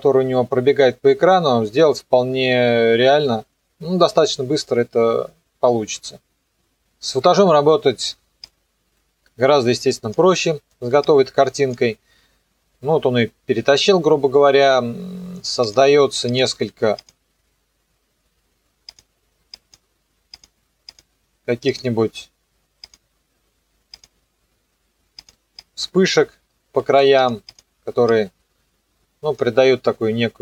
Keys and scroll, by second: 6.5 Return.